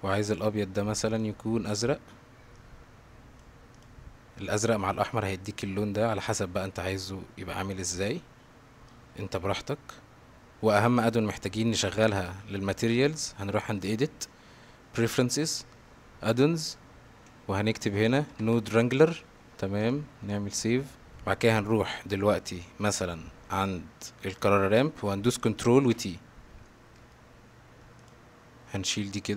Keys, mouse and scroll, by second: 0.3 click, 1.2 click, 1.7 click, 6.3-8.0 drag, 8.9-10.6 drag, 10.9-11.8 middle drag, 13.9-15.2 drag, 21.1 click, 24.4 click, 25.9 ctrl+t, 26.7 middle click, 28.0 click.